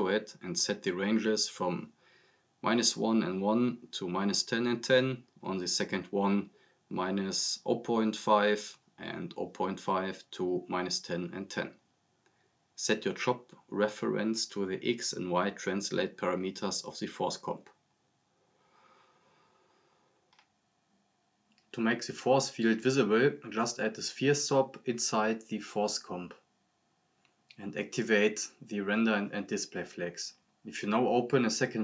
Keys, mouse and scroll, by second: 0.1 click, 0.7 click, 1.8 click, 3.1 click, 4.6 click, 5.7 click, 6.4 click, 7.5-8.2 drag, 9.4-11.5 typing, 10.4 click, 12.1 click, 13.3 click, 14.7-15.9 drag, 19.8 scroll down 1, 20.2-20.8 drag, 24.9 scroll down 1, 26.0 click, 26.7-27.5 typing, 27.5 click, 28.7 scroll down 1, 29.0 drag, 30.6 scroll down 1, 31.1 drag.